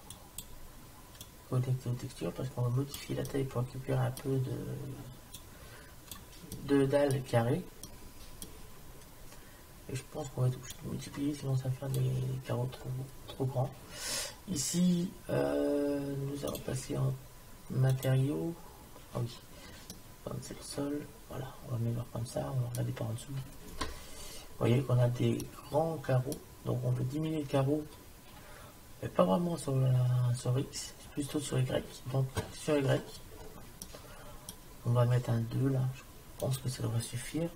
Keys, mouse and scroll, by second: 0.2-1.3 drag, 1.7-3.1 drag, 3.3-5.2 middle drag, 5.4 click, 6.6 click, 10.8 click, 12.7-13.8 middle drag, 12.7-13.8 scroll up 1, 19.9 middle click, 21.0 middle click, 24.2-28.9 middle drag, 32.9-35.9 middle drag, 32.9-33.9 scroll up 1, 36.5-37.5 drag.